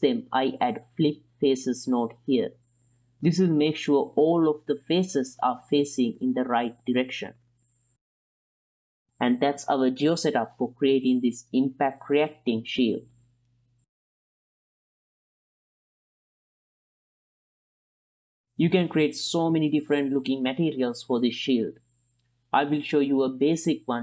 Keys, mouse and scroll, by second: 2.4 ctrl+click, 2.8-3.3 drag, 4.3-5.5 drag, 5.8 middle click, 6.0 click, 6.3 click, 6.6 click, 7.0 shift+p, 7.3 F2, 8.0 s, 8.4 n, 8.7 click, 9.0 click, 9.0 n, 9.8 g, 12.1 middle drag, 12.5 s, 13.1 g, 13.3 middle click, 13.8 click, 14.4 middle click, 16.4 click, 17.2 middle drag, 17.9-18.4 ctrl+drag, 18.4 middle click, 19.1-24.0 middle drag.